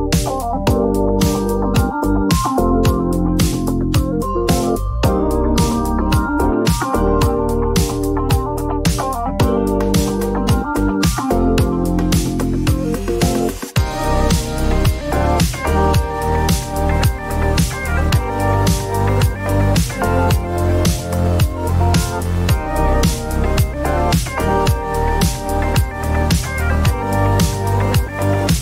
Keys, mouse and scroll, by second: 0.0 click, 1.4 click, 1.8-3.1 typing, 5.6-12.4 drag, 10.3 s, 14.8-18.2 drag, 15.9-17.2 Up, 19.4 Up, 19.8 Up, 23.1 Up, 23.9 Up, 23.9 click, 25.4 click.